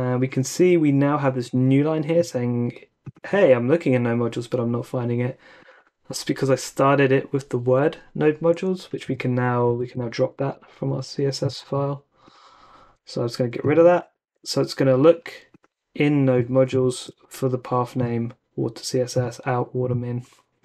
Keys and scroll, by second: 9.0 super+Tab, 9.7 super+Tab, 14.2 super+s, 14.2 typing, 16.9 super+Tab.